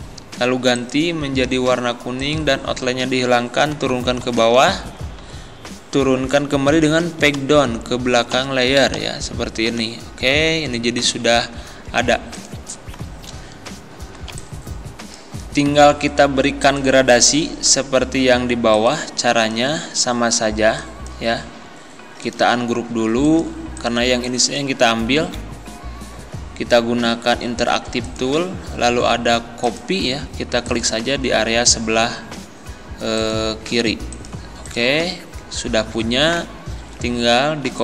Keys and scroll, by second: 3.8 Down, 7.4 ctrl+Page_Down, 10.3 Down, 11.1 Up, 14.3 ctrl+End, 19.9 ctrl+z, 21.5 ctrl+z, 25.2 ctrl+z.